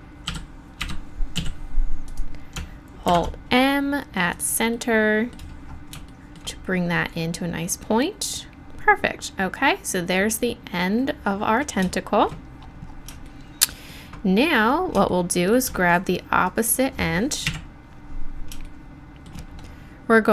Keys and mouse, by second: 0.0-1.2 drag, 0.3 e, 1.4 s, 2.1 click, 3.1 alt+m, 12.5-16.4 middle drag, 16.4-17.4 drag, 17.4 KP_1, 18.1 middle click.